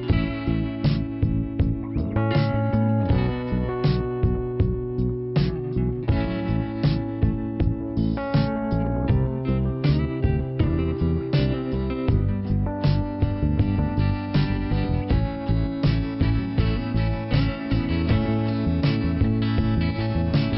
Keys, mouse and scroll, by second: 1.9 n, 2.8 scroll up 2, 3.6 click, 6.4 right click, 7.3 click, 8.6 click, 9.3 click, 10.6 click, 15.5 click, 17.6 click, 18.3 click, 20.1 click.